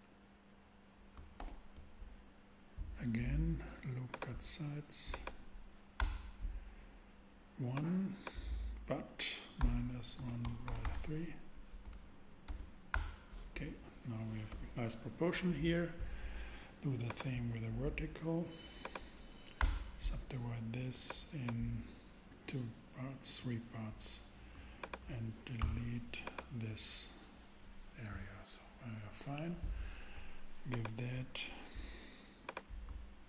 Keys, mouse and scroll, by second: 1.4 super+z, 4.1-5.9 drag, 6.0 Return, 7.7-8.8 drag, 9.6-12.4 typing, 12.9 Return, 19.6 Return, 21.0 scroll up 1, 25.6 super+x, 26.1 x.